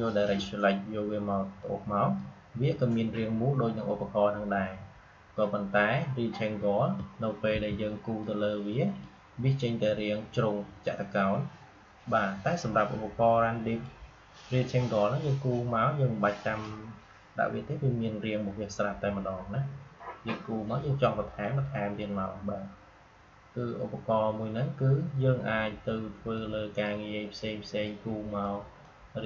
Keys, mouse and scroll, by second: 7.4 m, 8.1-11.4 drag, 12.4-19.0 drag, 21.3-24.3 drag, 26.3-29.2 drag.